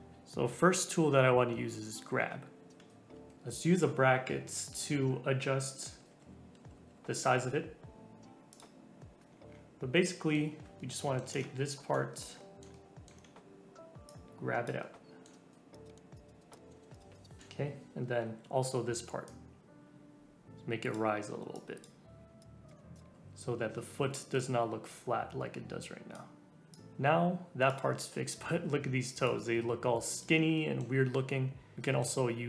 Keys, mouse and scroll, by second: 0.2 middle click, 3.1 g, 3.3 ], 3.6 ], 3.9 ], 4.4 middle click, 4.9 scroll down 3, 5.5-7.4 typing, 8.5 click, 9.2 scroll up 4, 10.0-14.1 middle drag, 14.1 click, 14.8 middle click, 15.7 click, 15.9 middle click, 16.0 scroll down 2, 16.1 click, 16.5 middle click, 16.9 click, 17.2 middle click, 18.0-18.8 typing, 19.2-22.7 drag, 22.7 middle click, 22.9 click, 23.0 scroll down 3, 23.1-24.0 typing, 24.4-27.0 drag, 27.0 shift+middle click, 27.7 click, 29.1 click, 29.8-32.0 middle drag.